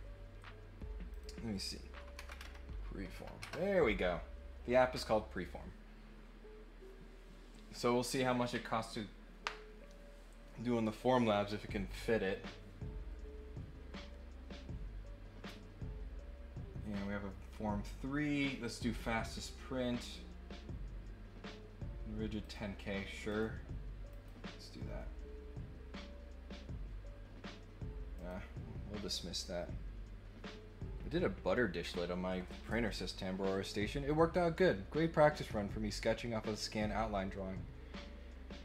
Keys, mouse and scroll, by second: 1.1 click, 22.4 click, 23.3 click, 24.1 click, 28.1 click.